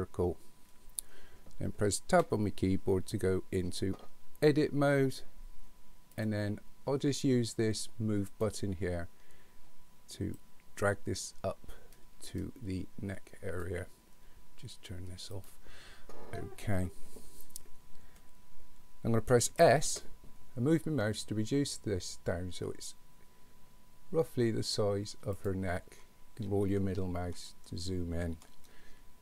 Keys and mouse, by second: 2.1 Tab, 8.3 click, 10.4-13.6 drag, 15.3 click, 19.5 s, 27.5 middle click, 28.7-29.2 shift+middle drag.